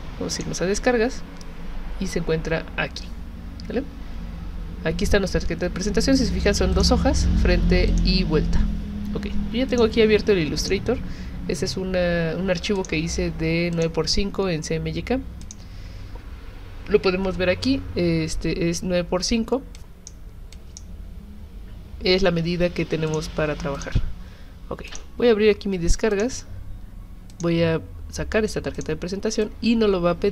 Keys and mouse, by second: 0.3 click, 6.7 click, 7.9 click, 9.7 click, 10.6 click, 12.7 click, 13.7 click, 15.4 click, 19.8 click, 20.5 click, 23.1 click, 23.8 click, 24.9 click, 26.1 click, 27.3 click, 28.8 click, 29.4-30.3 drag.